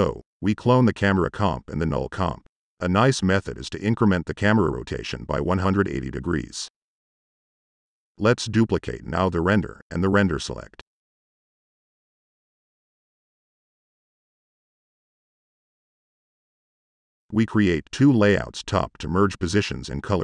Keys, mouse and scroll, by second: 0.2 ctrl+c, 0.6 ctrl+v, 8.2 ctrl+c, 8.5 ctrl+v, 14.5 Tab, 15.0 Tab.